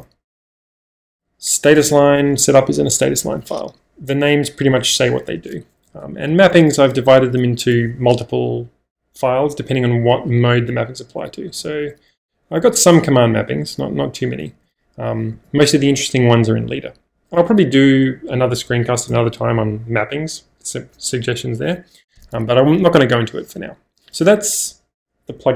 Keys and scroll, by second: 0.4 -, 1.1 j, 1.9 Return, 3.2 -, 5.3-7.1 typing, 11.5-12.6 typing, 12.7 Return, 14.5-15.5 typing, 17.5 -, 19.1 -.